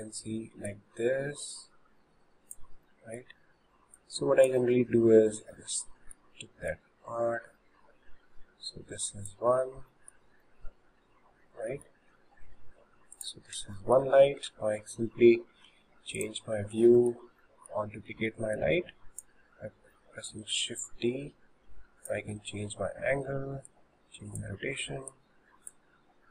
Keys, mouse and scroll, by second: 0.7 click, 3.0-4.0 middle drag, 4.0 click, 5.4-6.7 middle drag, 6.7 click, 10.1-12.6 shift+middle drag, 12.6 s, 13.8-15.7 shift+middle drag, 15.7 shift+d, 16.7-17.0 scroll down 2, 17.2-18.6 shift+middle drag, 18.6 click, 20.5 click, 23.7 click, 25.1 click.